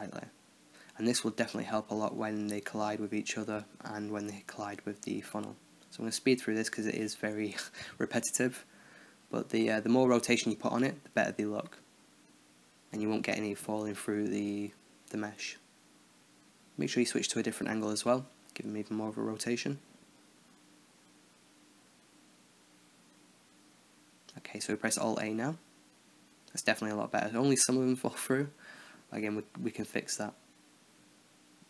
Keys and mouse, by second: 0.2 drag, 0.4-5.8 right drag, 0.4 r, 1.6 r, 2.9-19.9 typing, 6.0-7.0 right drag, 7.3-8.7 right drag, 8.8 right click, 9.8-10.3 right drag, 10.3-10.9 right drag, 10.9 click, 11.0 right click, 11.2-11.9 right drag, 12.0 right click, 13.4-13.8 drag, 13.9-14.7 drag, 17.1 middle drag, 17.3-17.9 drag, 17.9 middle click, 18.0 right click, 18.1 drag, 19.1 middle click, 19.2 right drag, 19.4-19.7 right drag, 19.8 middle click, 19.9 right click, 20.0 middle click, 20.8-22.2 middle drag, 22.2 alt+h, 24.5 alt+a, 27.5-29.4 middle drag, 29.4 KP_0.